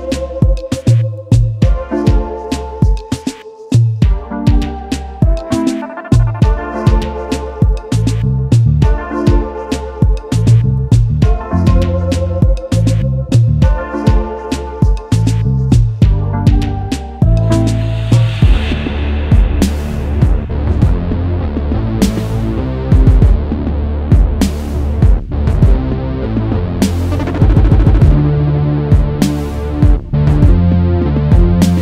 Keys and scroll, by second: 19.0 ctrl+c, 23.6 ctrl+v, 26.7 space, 28.0 space, 28.4 ctrl+s, 31.7 ctrl+s.